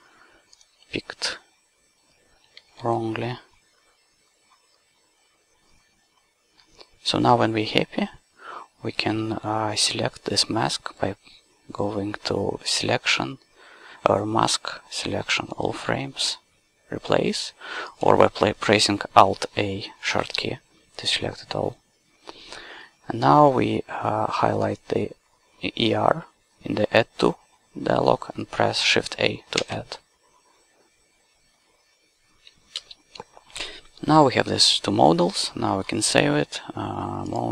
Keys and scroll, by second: 0.9 s, 2.6 q, 20.1 alt+a, 29.6 shift+a, 32.8 ctrl+space.